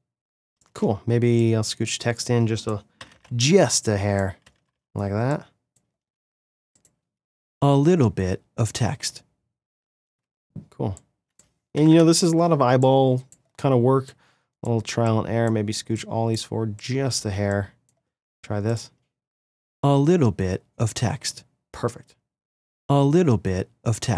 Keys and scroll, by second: 0.7 space, 4.5 -, 10.1 space, 11.9 =.